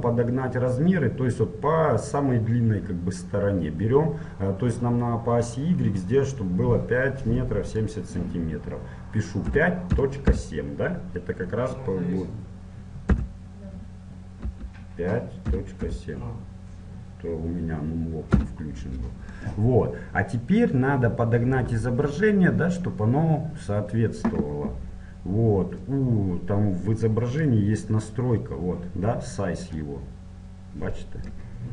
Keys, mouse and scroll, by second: 7.8-9.7 drag, 19.6-22.5 middle drag, 25.8-27.7 drag, 29.8-31.7 drag.